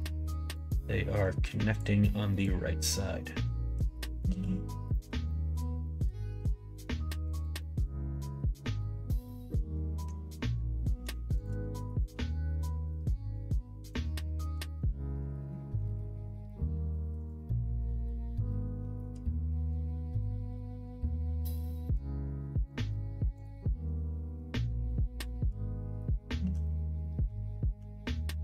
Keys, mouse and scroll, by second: 0.5-1.7 drag, 2.3 click, 3.2 click, 4.2 ctrl+z, 4.8 middle click, 5.2 shift+middle click, 5.8 middle click, 6.1 middle click, 7.3 click, 7.5-10.8 middle drag, 12.0 shift+click, 13.0 click, 14.1 middle click, 15.4 middle click, 16.0 middle click, 17.1 click, 17.4-18.7 middle drag, 19.7-21.6 drag, 21.6 middle click, 23.5 middle click, 24.5-26.2 drag, 26.4 ctrl+z, 26.6 middle click, 27.7 g.